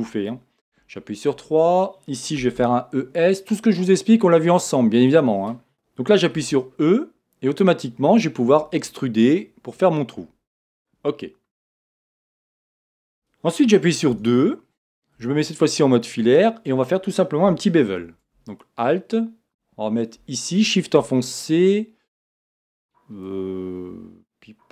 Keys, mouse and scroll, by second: 0.6 3, 1.2 click, 2.4 e, 5.2 click, 5.7 KP_1, 6.3 e, 10.8 click, 11.2-18.5 middle drag, 12.3-12.8 scroll up 2, 12.8-14.1 scroll down 2, 14.1-15.2 scroll down 1, 15.2 z, 18.5 alt+click, 20.5 alt+shift+click, 21.2-24.7 middle drag, 23.3-24.1 scroll up 2, 24.1-24.7 scroll down 2.